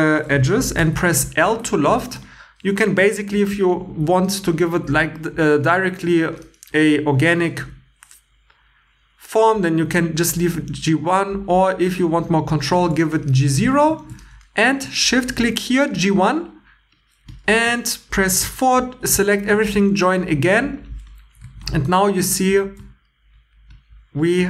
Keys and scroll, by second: 0.7 i, 2.0 shift+e, 14.0 shift+e, 18.1-19.6 typing, 21.4 Tab, 21.8 super+x, 22.1 super+x, 22.5 y.